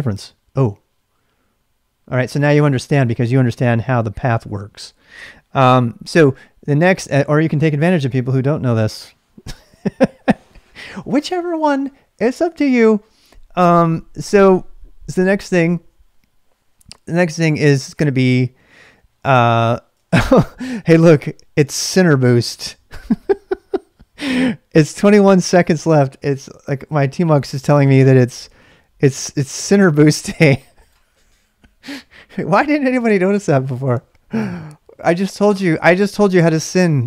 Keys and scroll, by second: 6.6-8.1 typing, 16.6-17.8 typing, 19.4-20.2 typing.